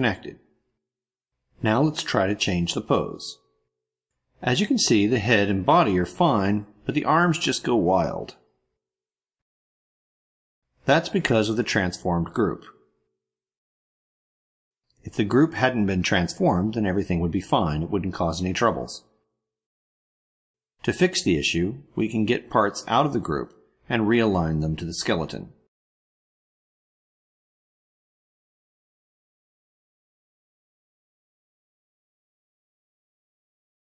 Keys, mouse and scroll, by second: 0.1 ctrl+middle click, 0.2 ctrl+scroll down 1, 0.5 ctrl+middle click, 2.7 click, 4.3 click, 5.9 click, 7.3 click, 8.9 click, 9.3 click, 10.3 click, 10.8 click, 11.3 click, 14.6 click, 17.4 click, 17.8 click, 18.6 click, 20.4 click, 24.7 click, 27.1 click.